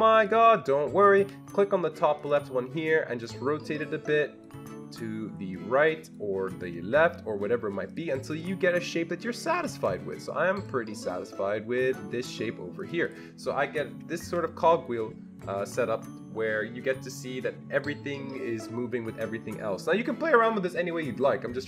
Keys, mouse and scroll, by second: 3.6 click, 4.4 click, 5.8 click, 8.4 click, 9.2 click, 9.8 ctrl+z, 11.0-12.5 drag, 13.0 click, 13.5 ctrl+scroll down 2, 14.0-15.8 ctrl+scroll up 2.